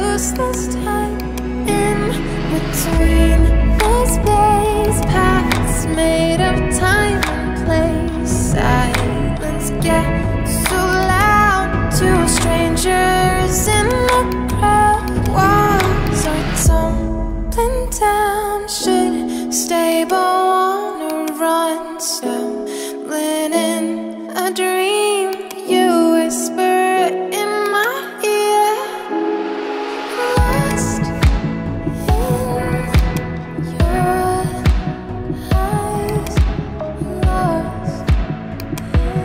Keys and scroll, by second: 12.1 4, 12.3 Return.